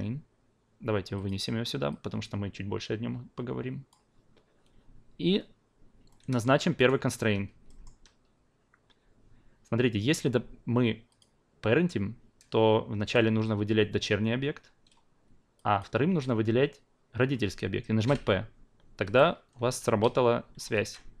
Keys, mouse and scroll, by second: 1.1 click, 1.9-3.9 drag, 6.1-6.4 alt+middle drag, 6.8 alt+right click, 7.7 alt+middle click, 11.1-15.2 drag, 15.5 shift+drag, 18.0 p, 19.0 drag, 19.6 w, 20.0-20.6 drag, 20.7 ctrl+z.